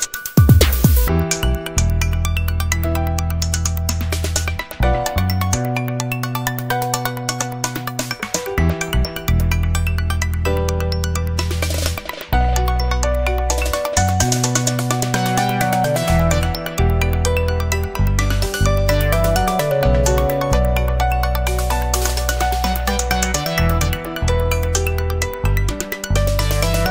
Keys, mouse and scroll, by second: 1.4 click, 2.5-2.9 scroll up 4, 3.7-5.6 drag, 6.3-8.1 drag, 8.5 click, 8.9 click, 9.5-9.8 scroll down 2, 9.9 scroll up 2, 10.7 click, 11.5 click, 12.9 click, 14.2 click, 14.7 click, 15.5-15.8 scroll up 1, 16.2 scroll down 1, 16.8 click, 18.0 scroll down 1, 18.8 click, 19.6 scroll up 1, 21.6 click, 23.7 click, 24.6 click.